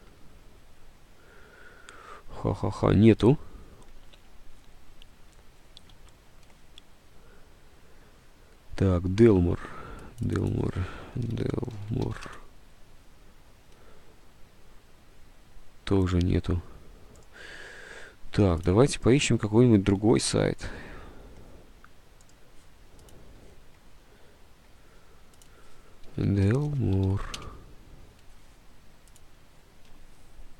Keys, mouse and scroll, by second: 9.5 alt+Tab, 11.1-12.7 typing, 25.9-27.7 typing.